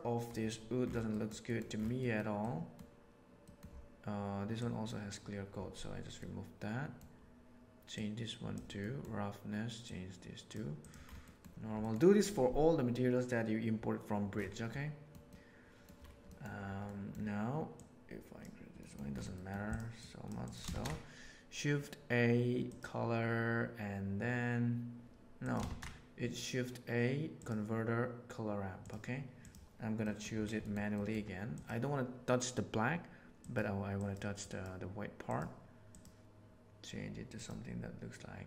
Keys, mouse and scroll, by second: 1.1 middle click, 1.5 middle drag, 1.9 middle click, 2.5 middle click, 3.4 middle click, 4.6 click, 6.2 middle click, 7.9 click, 8.9 middle click, 9.8-10.4 drag, 10.7 click, 11.3 middle click, 11.8 middle click, 14.7 middle click, 15.3 middle click, 16.2 middle click, 16.9 middle click, 17.7 click, 18.8 middle click, 19.4 middle click, 19.9 click, 20.4 click, 25.4 click, 25.6 shift+a, 30.1 middle click, 31.0 middle click, 31.5 click, 34.0 click, 34.5 click, 35.2 click.